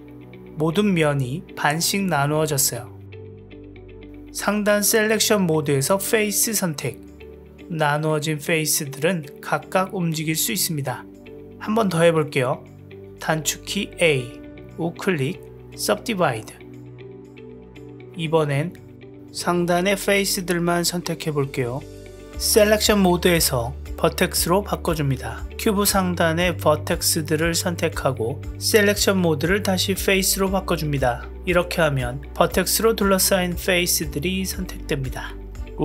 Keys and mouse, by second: 1.1-3.1 middle drag, 3.2 click, 3.7 g, 5.1 click, 7.4 click, 7.8 click, 8.2 g, 9.5 g, 10.5-11.8 middle drag, 13.2 a, 14.7-17.3 right drag, 17.7-20.8 middle drag, 21.2 click, 23.8 click, 25.9 click, 31.3-33.6 middle drag, 35.2-35.8 right drag.